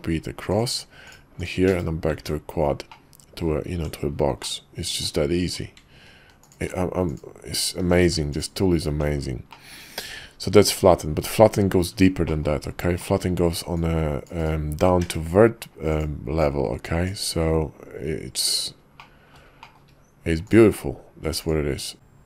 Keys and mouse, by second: 0.5-1.7 shift+middle drag, 2.1 Tab, 2.9-3.4 drag, 3.7 Tab, 4.4 click, 5.4 Tab, 7.0 alt+shift+click, 8.0 x, 8.9 Tab, 12.2 click, 13.0 click, 13.7-14.5 drag, 15.0 d, 16.4-18.5 right drag, 19.0-19.3 drag, 19.6 shift+click, 20.6 q.